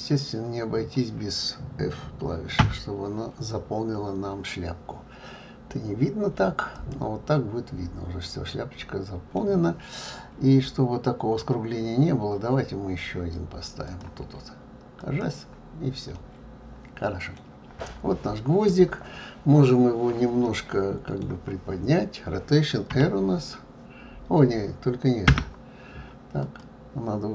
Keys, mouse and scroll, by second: 0.5-2.6 scroll up 3, 2.6 f, 6.7 click, 8.5-10.3 middle drag, 10.3-13.6 scroll up 3, 13.8 click, 15.0 click, 16.1-17.8 middle drag, 17.8-18.2 scroll down 10, 20.5-22.9 middle drag, 22.9 r, 26.4 click.